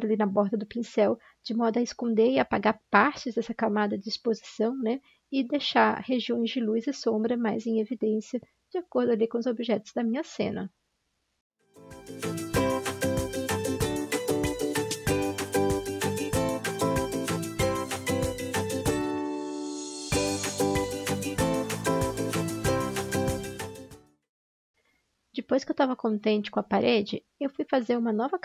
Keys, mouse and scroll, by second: 4.3 click, 9.7 ctrl+-, 10.1 ctrl+-, 11.5 ctrl+z, 11.6 ctrl+z, 12.9 x, 17.1 ctrl+z, 17.2 x, 17.7 ctrl+z, 20.7 ctrl+z.